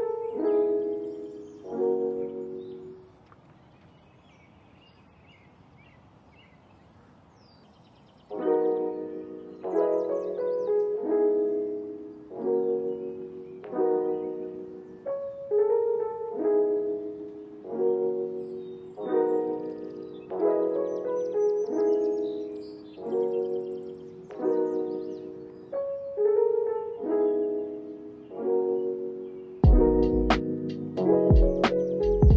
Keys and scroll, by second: 5.6 p, 12.0 x, 16.1 x, 18.9 ctrl+c, 19.1 ctrl+v, 24.9 ctrl+s, 25.6 space, 29.6 space, 31.9 Down.